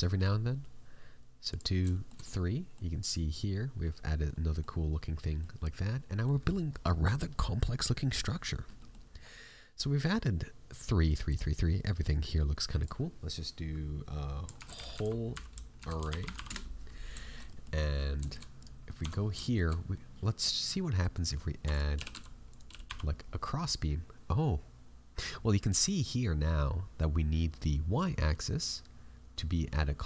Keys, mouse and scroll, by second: 1.4 click, 1.9 shift+middle click, 2.2 middle click, 4.2 middle click, 5.3 middle click, 8.7 middle click, 9.1-10.5 scroll down 2, 11.2 click, 11.2-11.7 scroll down 3, 17.2 shift+middle click, 17.4 middle click, 18.2 shift+middle click, 18.5 right click, 18.8 middle click, 18.9 Tab, 19.2 scroll up 3, 19.3 shift+middle click, 19.9 middle click, 20.8 right click, 21.6 e, 21.9 g.